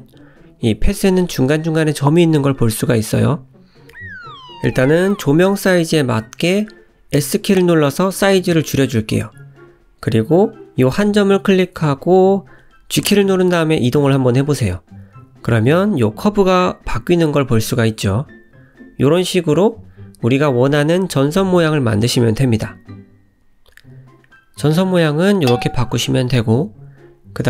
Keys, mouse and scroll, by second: 0.9 click, 1.4 click, 2.3 a, 3.8 s, 5.9-6.8 scroll up 5, 6.9 scroll up 1, 7.8 shift+middle click, 10.1 click, 10.4 g, 11.3 click, 11.6 g, 13.6 click, 14.0 g, 14.7 click, 15.1 g, 17.1-17.5 scroll up 1, 17.5 middle click, 18.2 Tab, 19.0 g, 20.0 Tab, 20.4 middle click, 21.7 Tab, 22.6 click, 23.6 click, 26.9-27.4 scroll down 5.